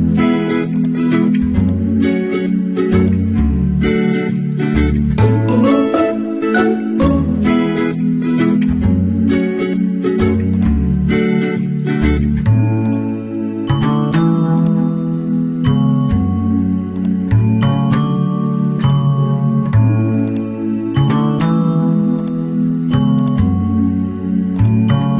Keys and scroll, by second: 2.0 ctrl+t, 4.7 Return, 5.3 ctrl+h.